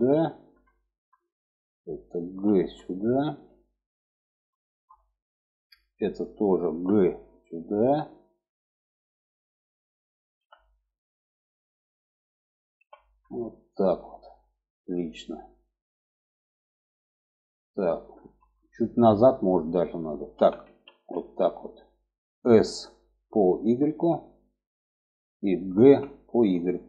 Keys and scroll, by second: 1.6 g, 6.0 g, 9.7 g, 12.1 g, 19.6 1, 20.2 alt+z, 22.0 s, 25.1 g.